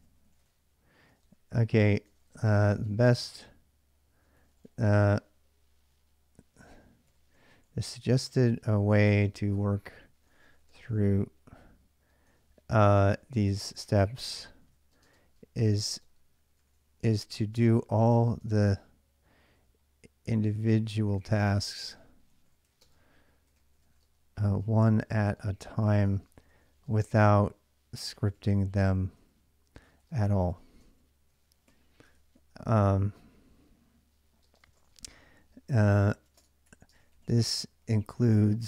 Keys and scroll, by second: 0.0-3.0 typing, 4.0-32.6 typing, 34.2-38.6 typing.